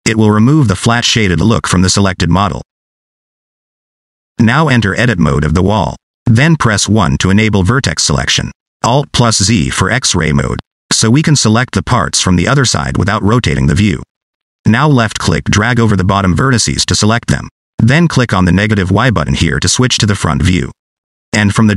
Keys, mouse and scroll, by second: 0.9 scroll down 2, 1.1 middle click, 2.0 click, 2.5 right click, 4.1 middle click, 5.8 Tab, 8.9 1, 14.5 alt+z, 16.0 click, 20.5 click.